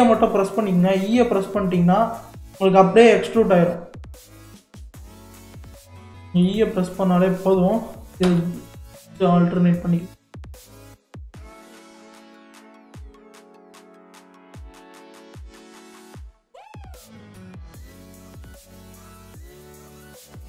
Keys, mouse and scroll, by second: 5.4 click, 6.1-7.2 shift+middle drag, 7.2 click, 8.2 g, 12.4 click, 13.4 g, 17.1 click, 17.5-20.4 middle drag.